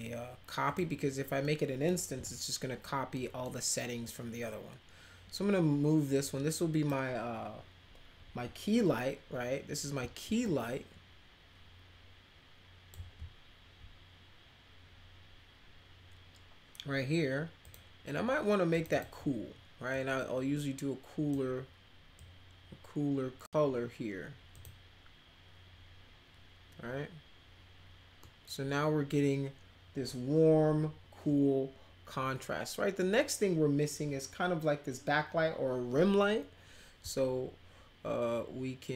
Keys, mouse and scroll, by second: 0.7 click, 1.4 middle click, 2.1 e, 3.1 middle click, 4.0-6.9 drag, 8.3 w, 10.4-12.9 drag, 17.6 click, 18.8 click, 18.9 click, 19.9-21.3 drag, 22.2-23.5 drag, 24.5 click, 28.2 middle click.